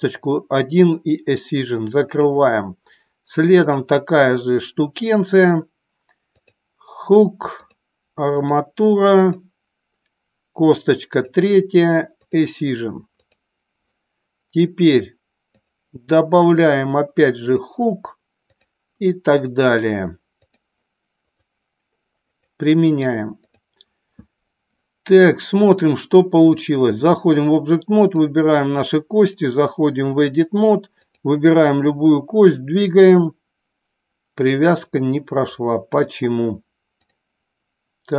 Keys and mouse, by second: 2.2 click, 3.6 click, 5.1 click, 7.6 click, 9.2 click, 16.3 click, 18.5 click, 20.5 click, 22.1 click, 23.3 click, 25.6 click, 26.3-27.2 drag, 28.1 click, 29.2-30.3 drag, 32.0-35.5 drag.